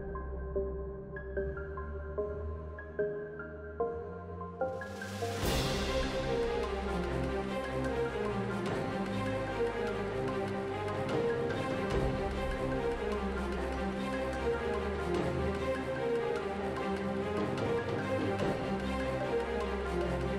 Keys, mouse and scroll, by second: 15.0 Tab, 15.7 z, 16.1 z, 16.9 Tab, 17.6 a, 17.7 a, 18.8 i.